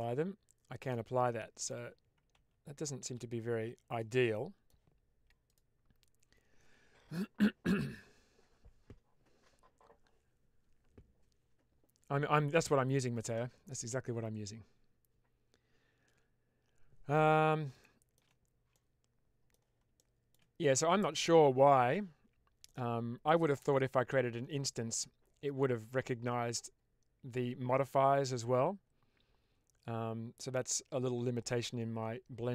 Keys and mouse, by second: 1.5 click, 2.3 ctrl+z, 3.0 ctrl+z, 3.9-4.6 middle drag, 17.7 shift+middle click, 18.6-19.5 middle drag, 19.8-20.2 shift+middle drag, 22.5 middle click, 30.3-31.6 middle drag.